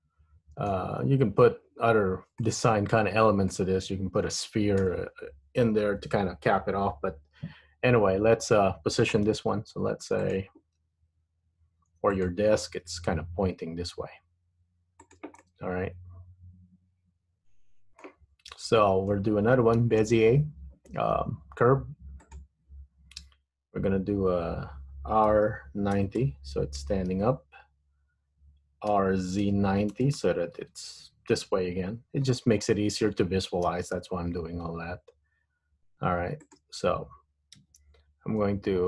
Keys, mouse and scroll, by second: 2.6 middle click, 5.0 KP_1, 8.1-9.4 scroll down 7, 9.4 g, 11.0 r, 12.8 g, 15.5 middle click, 18.6 KP_1, 19.9 shift+a, 25.4 r, 29.1 r, 32.4-32.8 scroll down 2, 32.8-33.8 scroll up 4, 33.8 g, 37.6 Tab.